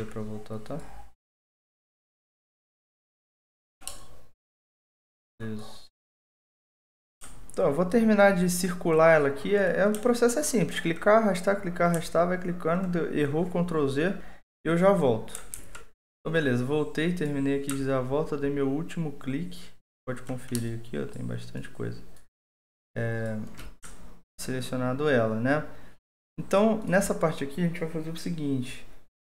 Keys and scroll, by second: 15.5 alt+2.